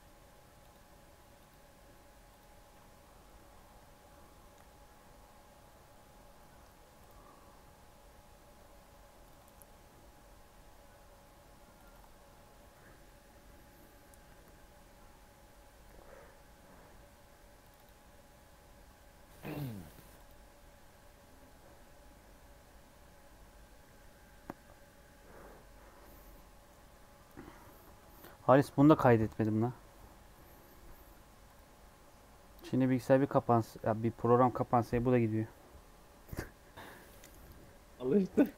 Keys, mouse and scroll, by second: 0.5-5.2 drag.